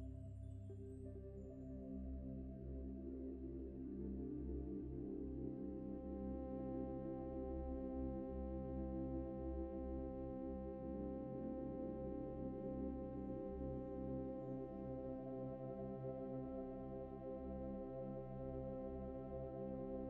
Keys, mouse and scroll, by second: 2.0 shift+click, 3.8 Return, 4.2 typing, 5.6 double click, 7.3 typing, 12.0 ctrl+t, 12.4 shift+click, 18.8 shift+click.